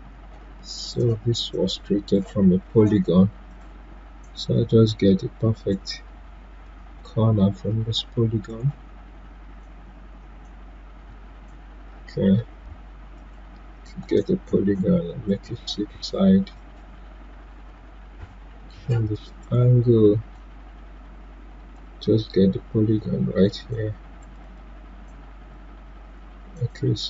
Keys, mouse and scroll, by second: 8.4 click, 13.1-16.5 drag, 17.5 0, 19.4-27.0 drag.